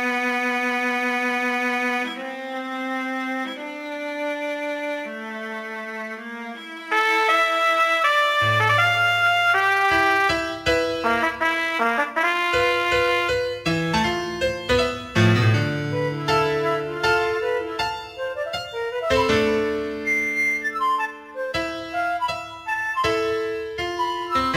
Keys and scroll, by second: 0.0-2.0 typing, 4.5 g, 5.5 g, 6.1 g, 11.6 g, 12.5 g, 13.2 g, 14.3 g, 16.9 g, 18.1 g, 19.6 g, 20.0 g, 22.0 g, 22.8 g, 23.4 g.